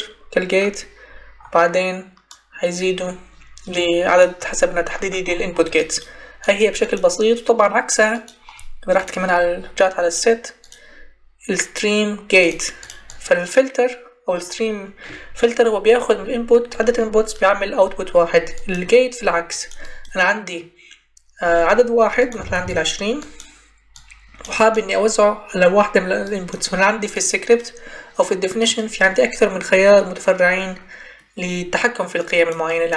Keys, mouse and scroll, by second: 19.4-19.8 drag, 22.3 ctrl+c, 22.5 ctrl+v.